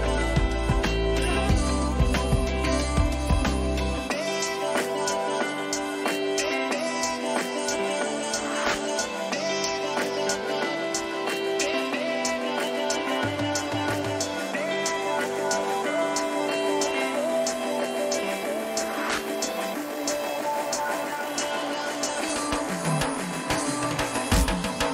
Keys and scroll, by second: 1.5 Return, 14.6 Return.